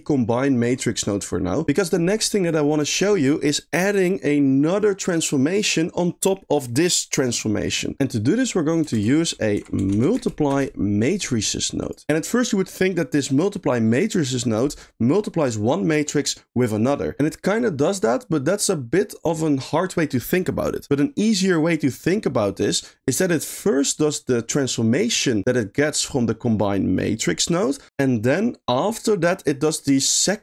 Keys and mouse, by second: 2.1 click, 2.3 click, 2.7 click, 8.0 shift+a, 8.5 middle click, 8.9 shift+a, 22.3 middle click, 23.2 middle click, 23.7 click, 29.8 middle click.